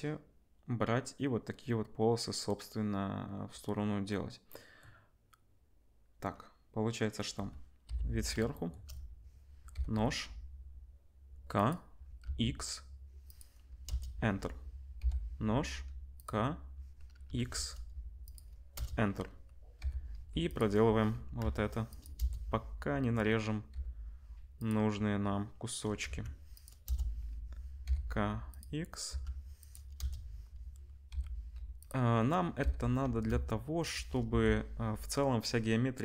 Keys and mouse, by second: 7.8 KP_7, 9.7 k, 15.0 k, 19.8 k, 23.7 k, 27.8 k, 31.1 k.